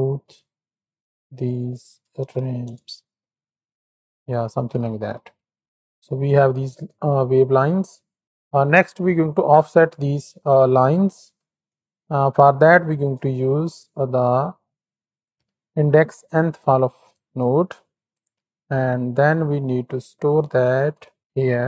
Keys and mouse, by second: 1.4-2.6 drag, 3.6-4.9 drag, 5.5 click, 6.6 click, 6.8-7.9 drag, 8.1 click, 12.8 shift+a, 17.4 click, 18.7 shift+a.